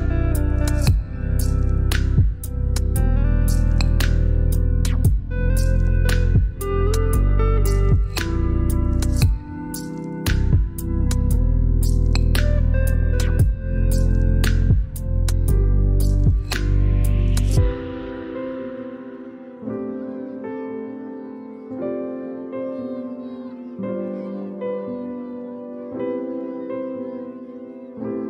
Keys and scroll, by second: 0.0-1.7 typing, 2.8 ctrl+a, 8.7 shift+Left, 9.6 Left, 10.0 Left, 10.6 Down, 11.3 Down, 11.9 Right, 18.6 ctrl+j, 19.6 shift+Down, 22.7 t, 26.0 ctrl+a.